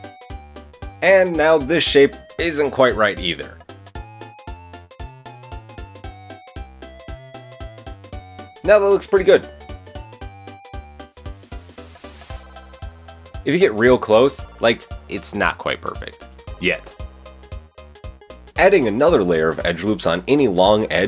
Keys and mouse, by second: 0.6 KP_3, 3.4 Tab, 4.3 KP_1, 5.5 ctrl+r, 7.5 Tab, 8.5 click, 8.8-9.2 drag, 9.8-11.3 middle drag, 10.8 r, 11.9 drag, 12.1 Tab, 12.2 Tab, 12.3 ctrl+z, 12.4 ctrl+z, 12.6 Tab, 13.6 click, 13.6-14.3 middle drag, 14.3 click, 14.5 Tab, 14.5 a, 14.8 KP_1, 15.0 Tab, 16.3 Tab, 16.6 Tab, 17.1 Tab, 17.3 Tab, 17.3 ctrl+i, 18.2 Tab, 18.3 KP_1, 19.0-21.0 ctrl+drag, 19.1 ctrl+r.